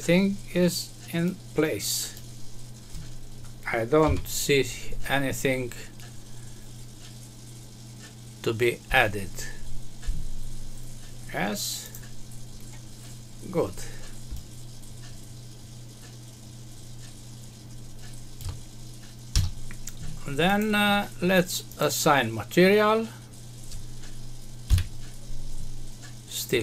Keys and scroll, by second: 4.0 Home, 19.3 F6.